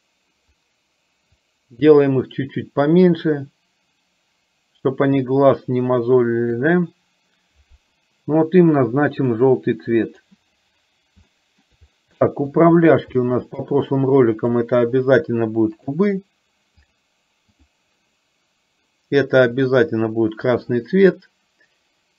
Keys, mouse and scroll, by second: 1.5-7.5 drag, 10.2 click, 11.4 shift+middle drag, 12.2 shift+middle click, 13.4 middle click, 13.9-14.6 drag, 15.9-17.1 drag, 17.5-18.0 drag, 19.6 click, 20.6 click.